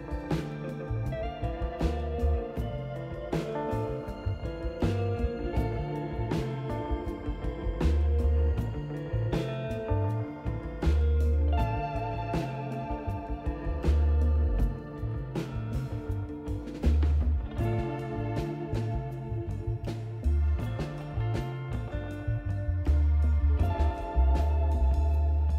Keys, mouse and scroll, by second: 3.3 click, 5.0 5, 6.3 click, 7.6 click, 8.9 click, 9.8 click, 10.4 right click, 11.0 scroll down 1, 11.3 click, 12.2 click, 13.5 ctrl+click, 13.8 scroll down 1, 14.4 click, 15.6 ctrl+click, 16.7 ctrl+click, 20.0 click, 21.4 6, 23.7 click, 24.7 click.